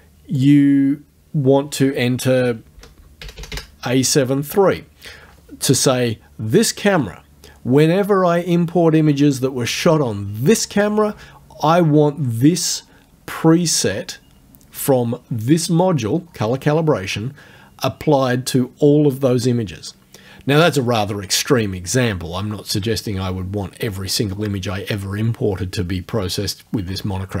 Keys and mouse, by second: 0.4 click, 2.3-3.8 typing.